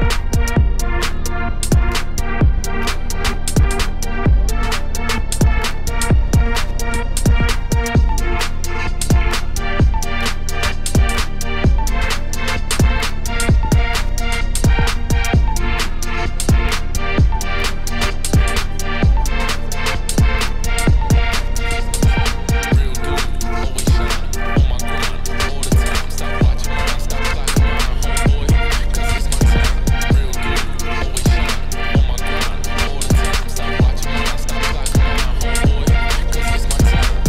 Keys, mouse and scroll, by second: 1.6 i, 2.1 g, 3.1 Tab, 3.3 scroll down 1, 3.6 scroll up 2, 3.8 Tab, 4.4-5.6 right drag, 6.1-7.3 middle drag, 7.3 r, 8.6 KP_7, 9.3 middle click, 9.5 scroll down 1, 9.6 Tab, 9.9 middle click, 10.3 scroll up 1, 10.4 middle click, 10.6 Tab, 10.7 2, 10.9 alt+click, 11.2 ctrl+b, 12.7 Tab, 12.8-13.3 scroll down 3, 13.3 middle click, 14.2 click, 14.3 Tab, 14.4 3, 14.6 click, 15.3 middle click, 15.6 alt+s, 17.7 Tab, 18.0-18.5 scroll down 3, 18.5 middle click, 18.9 click, 19.7-21.8 shift+middle drag, 22.3 middle click, 22.9 shift+right click, 23.7 shift+a, 24.2 Tab, 24.3 s, 26.4 middle click, 27.2 click, 27.8 e, 29.3 middle click, 29.5 a, 29.7 s, 30.6 2, 30.7-31.9 shift+drag, 31.9 ctrl+b, 34.8 middle click, 35.8-36.6 scroll down 1, 36.6-37.2 scroll up 1, 37.2 middle click.